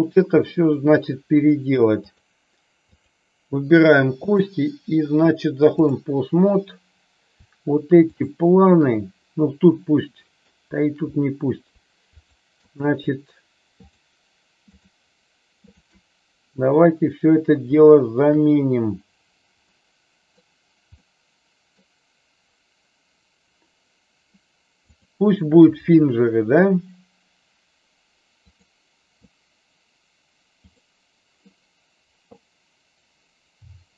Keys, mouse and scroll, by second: 0.3 middle click, 2.0 click, 4.1-6.0 drag, 9.6-10.3 middle drag, 12.1-12.5 shift+drag, 13.7-14.1 shift+drag, 14.7 shift+click, 15.6 shift+click, 19.6 middle click, 20.8 middle click, 25.0-28.6 drag, 30.6 click.